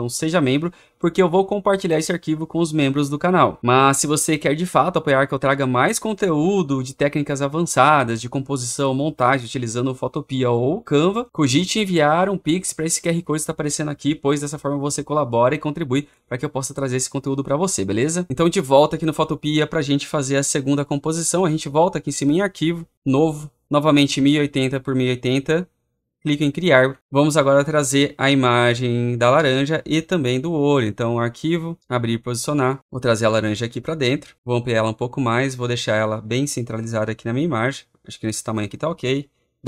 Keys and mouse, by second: 31.2-32.8 drag, 32.9-36.6 drag, 38.1 click, 39.5 Return.